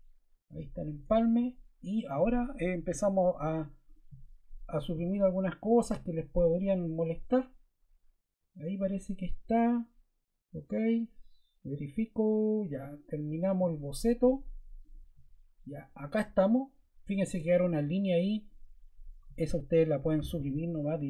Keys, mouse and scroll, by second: 0.9 Return, 2.8 t, 3.8 0, 4.7 click, 5.6 click, 19.0 BackSpace, 20.0 BackSpace.